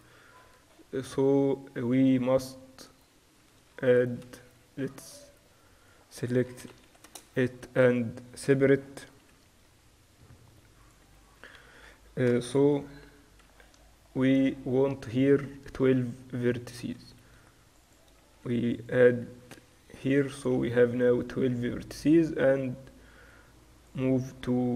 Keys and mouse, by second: 0.4-4.8 middle drag, 3.8 ctrl+r, 5.0 Tab, 5.9-9.5 drag, 6.7 ctrl+l, 7.0 p, 7.3 Tab, 9.8 n, 11.1-12.8 drag, 11.1 n, 12.8 KP_Divide, 13.6 middle click, 15.4-18.3 middle drag, 16.0 Tab, 17.3 ctrl+r, 18.3 ctrl+r, 20.5 a, 20.7-22.7 drag, 21.6 w, 24.5 Tab.